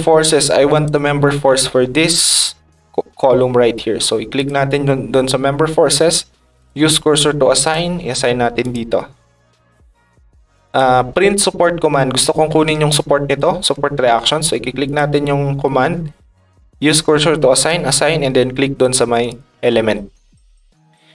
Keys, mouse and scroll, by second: 0.7 click, 0.8 Tab, 4.3 click, 6.6 click, 7.6 click, 8.6 click, 10.6 click, 12.9 ctrl+click, 14.8 click, 17.6 click, 19.2 click.